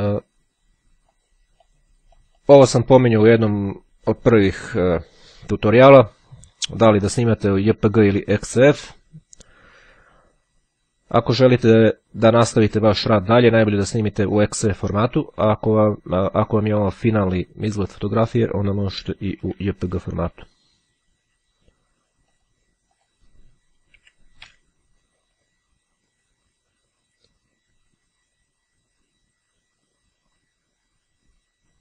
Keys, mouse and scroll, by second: 1.1 click, 1.5-3.2 drag, 18.4-19.4 typing, 22.2 click, 23.4 KP_Subtract, 24.6 KP_1, 26.2 click, 29.9 click.